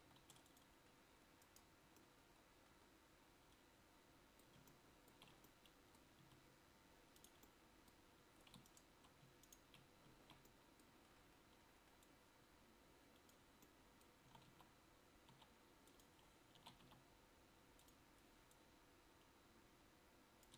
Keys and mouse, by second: 0.0 ctrl+s, 6.3 Tab.